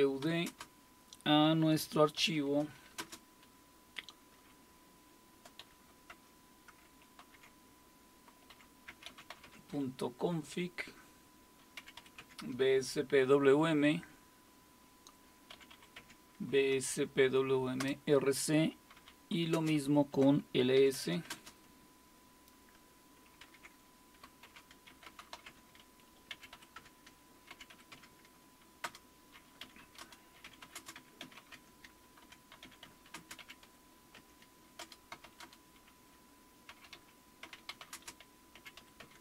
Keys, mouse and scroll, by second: 0.0-0.4 typing, 2.2-3.0 typing, 5.6-6.1 typing, 7.2 typing, 8.3-9.8 typing, 11.5-12.3 typing, 15.5-16.2 typing, 16.0 Tab, 17.8 typing, 18.9-19.5 typing, 20.8-21.3 typing, 23.2-39.2 typing.